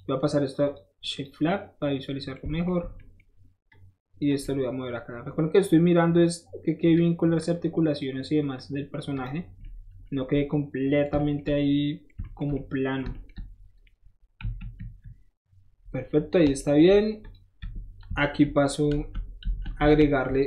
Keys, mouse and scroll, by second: 0.6 alt+shift+click, 1.2 click, 3.7 shift+click, 5.6-6.8 drag, 7.4 click, 8.6 click, 9.1 click, 9.6-10.2 middle drag, 10.4-11.1 middle drag, 11.2 shift+middle drag, 11.6-12.6 shift+middle drag, 13.0 shift+middle click, 14.4 KP_1, 14.8 KP_3, 16.2 middle drag, 16.6 shift+middle drag, 17.2 shift+click, 17.6 Tab, 18.9 alt+shift+z, 19.8 alt+shift+z.